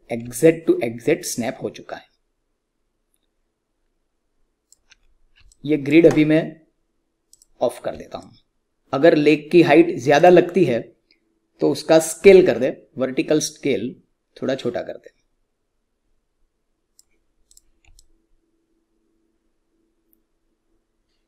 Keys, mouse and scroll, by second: 0.3-4.9 alt+drag, 4.9-5.3 scroll down 1, 5.4-7.2 alt+drag, 8.1 alt+click, 10.1 click, 12.1 r, 13.4-17.4 drag, 17.9-21.2 alt+drag.